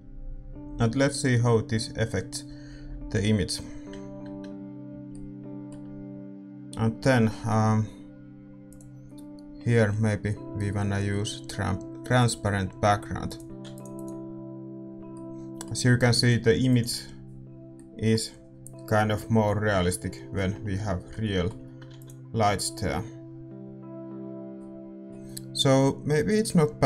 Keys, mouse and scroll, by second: 0.0-5.1 drag, 5.1-13.5 middle drag, 12.2-19.5 drag, 15.2 ctrl+s, 15.2-26.8 middle drag, 17.9 ctrl+s, 22.8 ctrl+s.